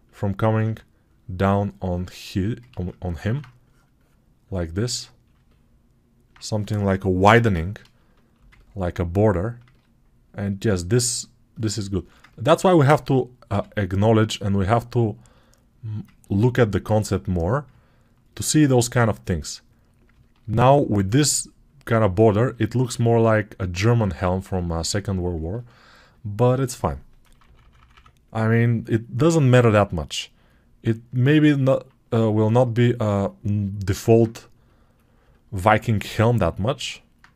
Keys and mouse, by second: 2.6 ctrl+z, 3.1 alt+q, 13.4 g, 25.6-30.8 alt+shift+drag, 25.6-30.8 alt+shift+middle drag, 25.6-30.8 alt+shift+right drag, 27.3 [.